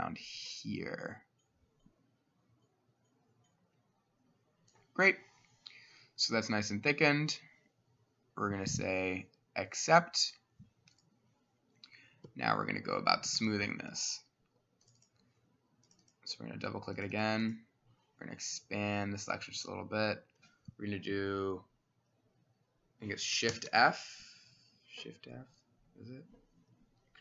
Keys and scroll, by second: 12.3 Escape, 13.4 s, 23.6 f.